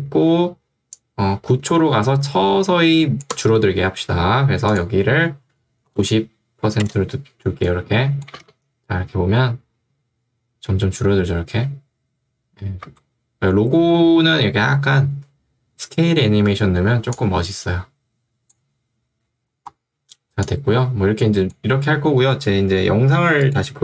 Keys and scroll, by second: 5.9 9, 6.9 Return, 8.3 space, 12.9 space.